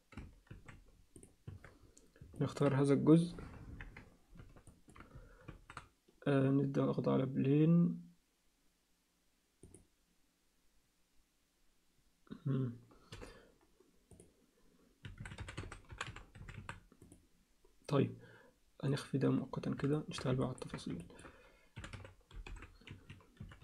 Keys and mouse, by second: 0.5 shift+s, 1.5 Tab, 2.4 alt+middle click, 3.7 ctrl+KP_1, 4.7 alt+shift+middle click, 5.4 shift+a, 13.1 m, 18.9 click, 19.9 alt+shift+middle click, 20.4 ctrl+alt+middle click, 21.0 ctrl+alt+middle click, 21.8 r, 23.4 r.